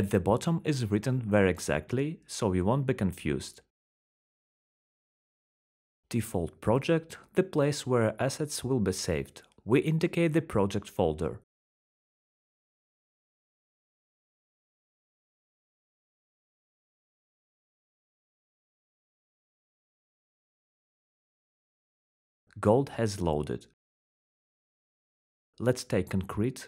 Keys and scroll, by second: 9.8 ctrl+c, 12.4 ctrl+v, 13.1 Return, 23.3-26.6 typing.